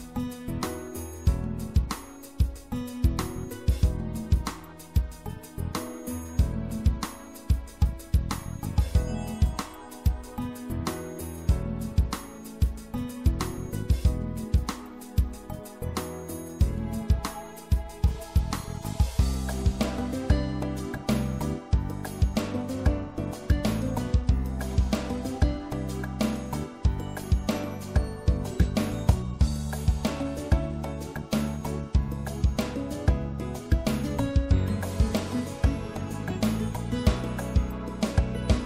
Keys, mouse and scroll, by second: 2.5-4.8 middle drag, 4.8-8.1 right drag, 8.1 middle click, 8.9 middle click, 10.0 middle click, 12.4-15.0 drag, 15.0 right click, 21.5-23.3 drag, 21.5 right click, 24.7-26.5 drag, 26.6-29.0 right drag, 29.0-30.4 shift+drag, 31.2 shift+click, 32.0-33.8 shift+middle drag.